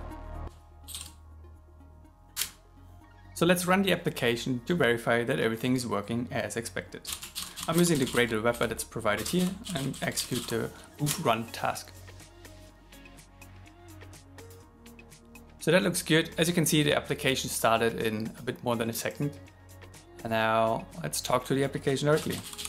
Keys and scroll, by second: 0.5 shift+8, 7.4 shift+7, 11.2 shift+r.